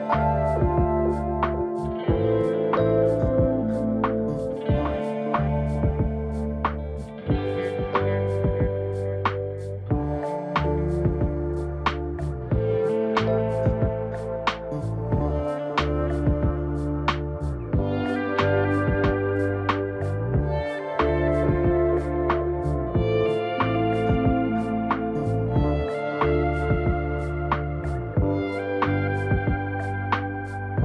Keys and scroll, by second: 1.4 ctrl+j, 3.8 ctrl+t, 11.1 ctrl+t, 19.2 ctrl+t.